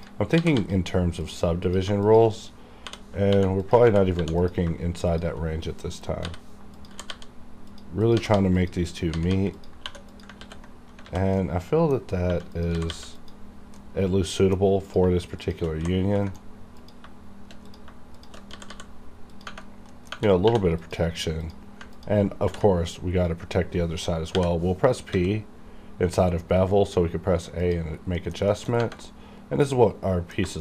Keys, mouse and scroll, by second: 0.0 click, 0.0 click, 0.3 g, 0.5 g, 1.3 click, 2.0 shift+click, 3.3 j, 3.6 click, 3.7 click, 3.9 ctrl+x, 4.2 1, 4.4 click, 5.1 shift+click, 6.3 j, 6.8 click, 6.9 g, 7.1 g, 7.7 click, 8.2-9.9 typing, 8.6 click, 9.6 click, 10.1 click, 10.4 ctrl+x, 11.1 alt+a, 11.4 middle click, 12.3 1, 12.6 click, 12.8 g, 12.9 g, 13.2 click, 13.6 scroll down 2, 13.8-14.8 middle drag, 14.8 click, 15.4 shift+click, 15.8 g, 16.3 right click, 16.8 click, 17.7 click, 18.1 shift+click, 18.5 g, 18.7 g, 19.3 click, 19.7 scroll down 1, 19.9 middle click, 20.4 2, 20.8 click, 20.8 click, 21.9 ctrl+click, 22.5 ctrl+b, 23.5-24.3 scroll up 2, 24.4-25.1 typing, 27.7 click, 28.0 scroll down 1, 28.2 middle click, 28.5 shift+middle click, 28.7 shift+scroll down 2, 29.1-30.5 middle drag, 30.5 shift+middle click.